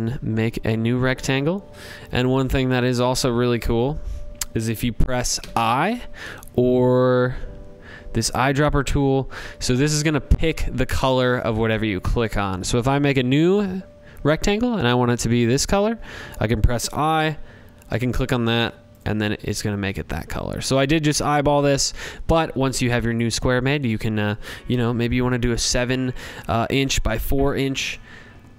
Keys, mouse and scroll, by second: 6.5-7.8 drag, 16.2-17.4 drag, 17.9 click, 19.3 click, 20.6 click.